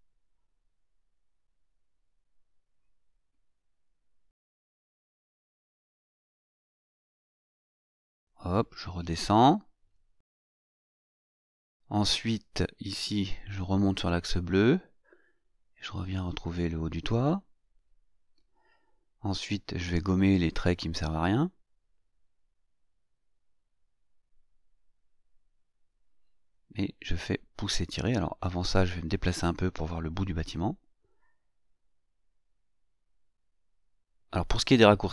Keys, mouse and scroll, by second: 1.9 click, 6.0 click, 8.8 click, 10.4 click, 12.8 click, 15.8 click, 19.2 click, 21.2 click, 21.9 click, 24.1 click, 25.8-26.8 scroll down 1, 27.0 shift+scroll up 2, 30.9 click.